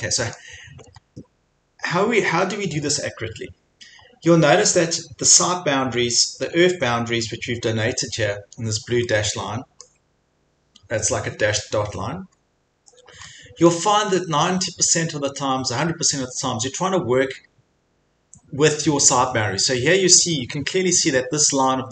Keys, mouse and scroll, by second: 0.4 middle click, 1.0 scroll, 1.1 scroll down 4, 4.1 scroll, 6.9 scroll, 8.4 scroll, 9.8 scroll, 10.3 middle click, 10.3 middle click, 10.6 middle click, 12.4 middle click, 12.4 middle click, 12.5 middle click, 13.3 scroll, 14.2 scroll, 16.6 scroll.